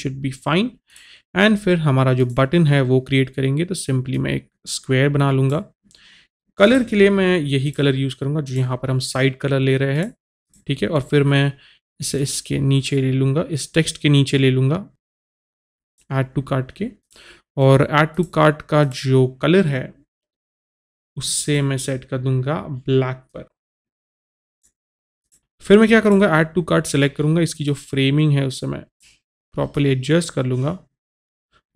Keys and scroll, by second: 25.4 typing.